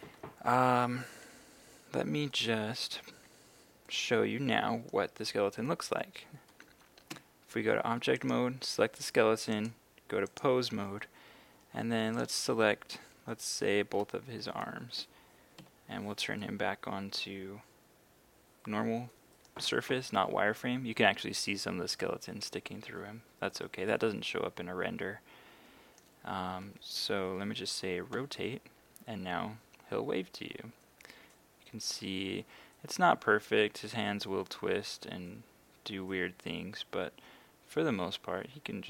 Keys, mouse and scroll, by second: 1.0 a, 2.3 middle click, 3.1 a, 3.9-5.1 middle drag, 7.2 Tab, 8.2-9.2 right drag, 9.5 click, 12.2 right click, 13.5 shift+right click, 15.6 z, 16.4-26.5 middle drag, 28.1 r.